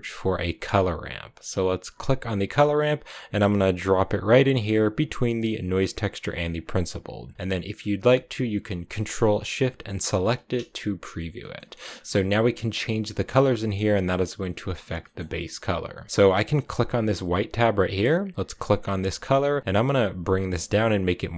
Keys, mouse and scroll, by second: 6.7-7.8 drag, 10.0 ctrl+shift+click, 11.2 middle click, 11.4-12.3 scroll up 6, 14.6 scroll down 1, 14.9-17.1 middle drag, 17.1-18.8 drag.